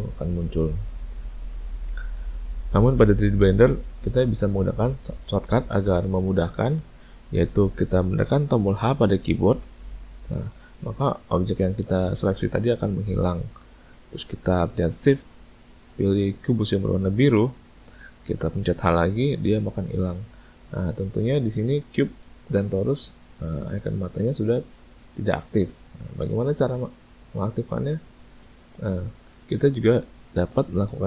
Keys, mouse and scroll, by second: 5.3 click, 9.6 h, 17.3 shift+click, 18.9 h.